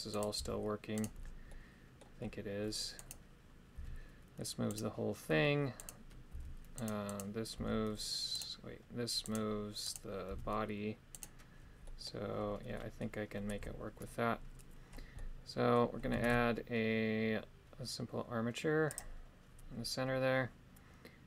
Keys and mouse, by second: 0.1 right click, 0.3 g, 1.4 middle click, 3.0 right click, 3.7 g, 4.6 right click, 6.3 g, 6.7 right click, 7.1 right click, 7.5 g, 9.2 right click, 9.8 right click, 10.3 g, 11.1 right click, 11.8 middle click, 12.7 middle click, 13.5 KP_3, 15.1 middle click, 16.3 shift+a.